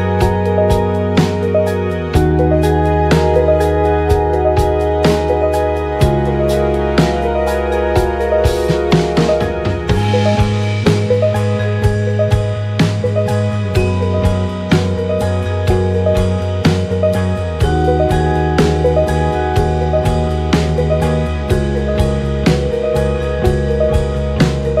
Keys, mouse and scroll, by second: 0.8-1.9 typing, 2.1-3.8 drag, 3.2 ctrl+z, 3.3 ctrl+z, 3.5 ctrl+z, 4.3-5.6 drag, 5.4 f, 5.6-7.3 drag, 7.1 f, 7.5-9.3 drag, 9.0 f, 9.6-24.8 drag, 13.4 KP_7, 15.0 g, 16.6 ctrl+z, 22.3 ctrl+z.